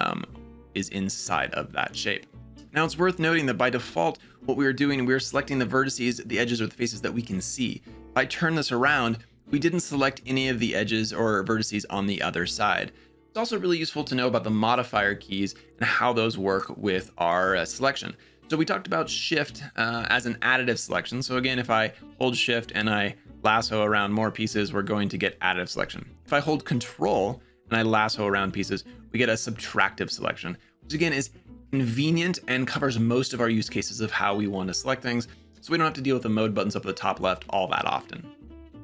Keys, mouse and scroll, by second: 8.0-13.1 middle drag, 21.9-24.3 shift+drag, 27.0-28.9 ctrl+drag.